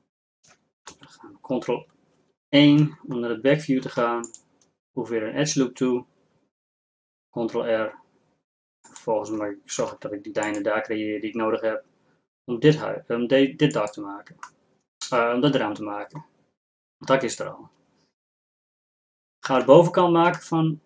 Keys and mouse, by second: 3.8 ctrl+r, 9.8 ctrl+r, 14.8-16.1 drag.